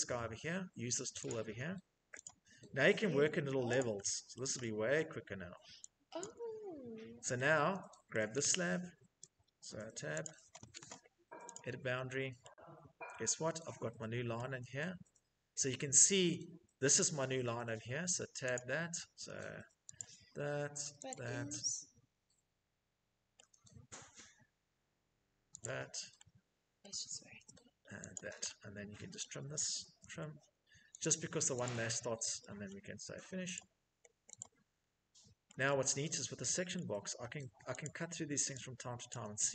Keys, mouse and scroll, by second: 0.5 click, 1.4 click, 3.0 click, 3.5 middle click, 4.2 shift+middle click, 5.4 click, 7.3 shift+middle click, 8.0 Escape, 8.2 Escape, 8.8 Tab, 14.9 middle click, 16.1 shift+middle click, 16.6 middle click, 16.7 middle click, 17.7 click, 19.1 click, 20.3 click, 22.5 shift+middle click, 24.8 click, 25.0 click, 25.0 click, 25.1 click, 26.0 shift+middle click, 27.3 click, 28.4 shift+middle click, 28.9-29.8 typing, 30.2 click, 30.8 click, 31.9 middle click, 32.7 click, 33.5 click, 35.2 shift+middle click, 35.9 shift+middle click, 37.0 click, 38.3 click.